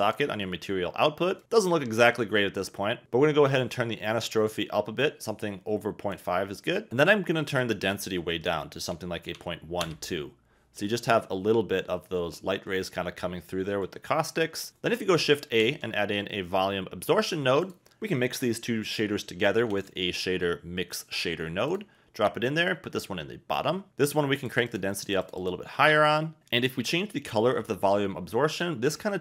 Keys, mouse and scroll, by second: 1.4 click, 3.8-6.1 drag, 7.9-9.8 drag, 10.8 middle click, 15.4 shift+a, 21.7 shift+click, 22.7 shift+click, 24.3 click, 24.6 click, 25.1 click, 25.2 click, 25.4 click, 26.0 click.